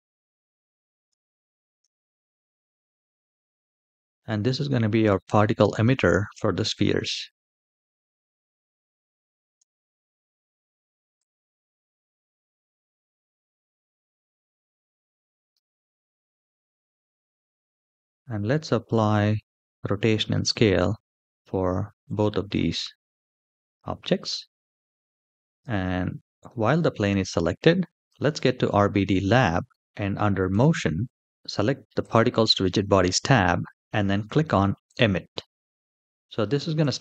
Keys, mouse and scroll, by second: 0.8 r, 3.4 g, 8.9 g, 10.9 s, 14.4-15.2 scroll down 2, 15.2 g, 17.3-18.0 middle drag, 18.4 shift+middle drag, 18.8-19.2 middle drag, 20.2 click, 21.7 ctrl+a, 24.5 click, 25.2 click, 25.8-26.2 middle drag, 26.5 shift+middle click, 27.7 click, 30.1 click, 31.7 click, 34.6 click, 36.2 shift+middle click.